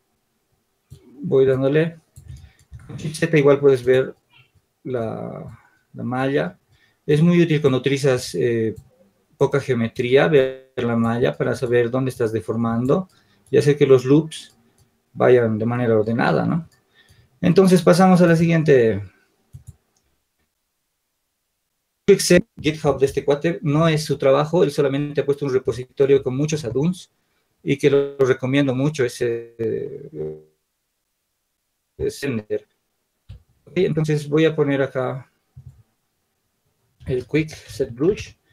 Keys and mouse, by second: 5.0-6.7 shift+drag, 11.1-13.4 drag, 18.0 click.